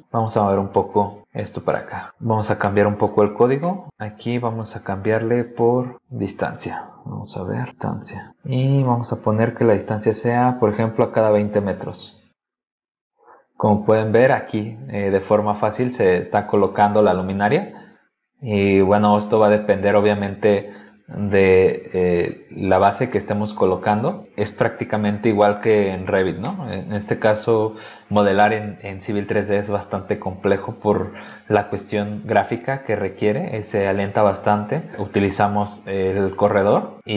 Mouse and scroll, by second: 2.2 scroll down 2, 2.6 middle click, 3.6 middle click, 4.0-4.7 scroll up 2, 5.6 click, 8.8 click, 17.3 click, 20.7 click, 21.6 scroll down 1, 22.4 scroll down 1, 23.1 middle click, 26.4-27.6 middle drag, 34.9 click.